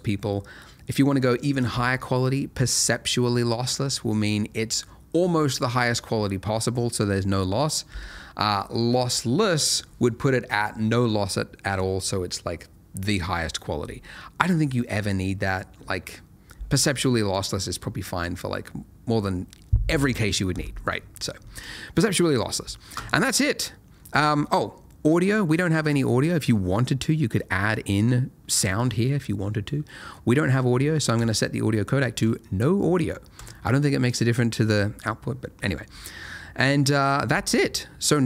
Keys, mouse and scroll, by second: 17.3 click, 21.6 click, 23.9 middle click, 24.4-25.1 scroll up 1, 25.1 middle click, 26.8 click, 36.2 middle click.